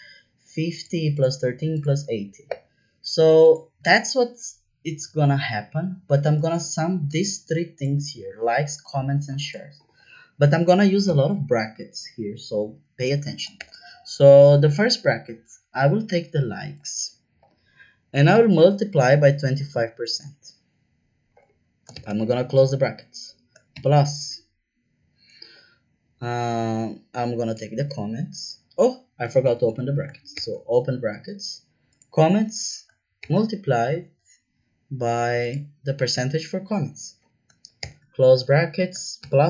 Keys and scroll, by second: 11.0 =, 13.5 shift+9, 18.3 shift+8, 21.9 shift+0, 29.4 BackSpace, 29.6 BackSpace, 30.3 shift+9, 33.2 shift+8, 37.8 shift+0.